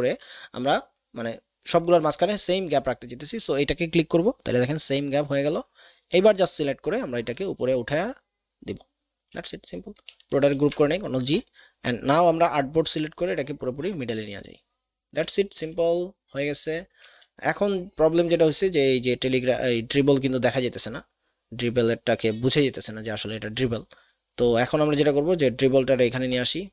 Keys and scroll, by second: 10.5 ctrl+g.